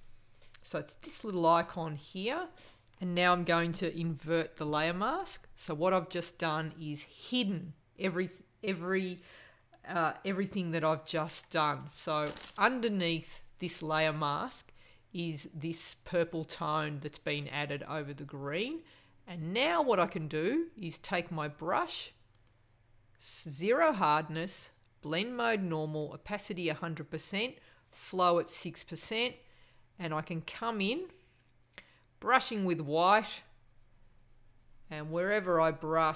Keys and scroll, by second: 4.6 super+i.